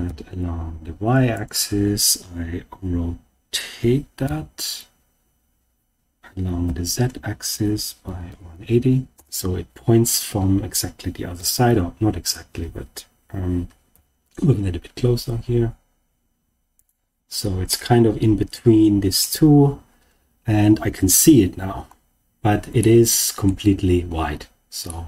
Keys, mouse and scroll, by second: 0.0 y, 1.3 click, 4.2 r, 6.6 z, 7.4 1, 8.0 8, 8.3 0, 9.1 Return, 11.3 g, 13.8 y, 16.7 click, 17.6-19.2 middle drag, 19.9 scroll down 1, 21.2-22.6 scroll up 3, 22.7-23.4 shift+middle drag, 24.8-25.0 middle drag.